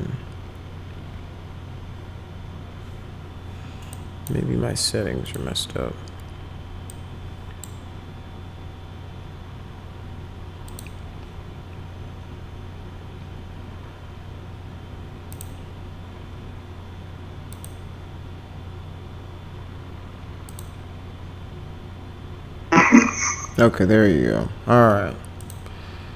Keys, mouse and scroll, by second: 3.9 click, 5.2 click, 6.9 click, 10.7 click, 15.3 click, 17.5 click, 20.5 click, 25.4 click.